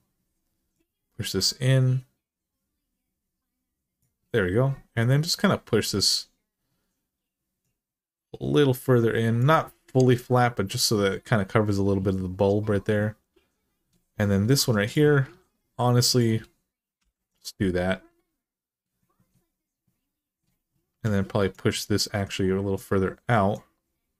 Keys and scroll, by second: 14.4 2, 16.8 f, 20.7 1.